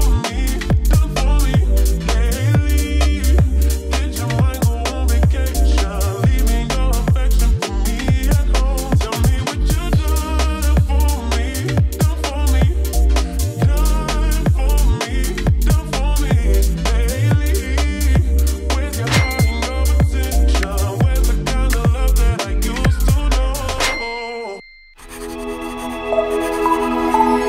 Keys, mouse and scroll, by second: 0.3-1.8 drag, 1.8 space.